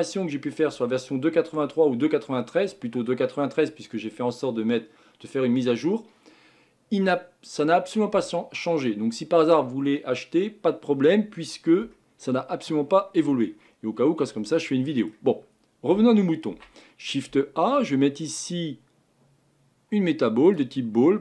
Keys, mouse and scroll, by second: 11.9-15.2 shift+middle drag, 15.2-16.5 scroll up 1, 16.5 shift+a.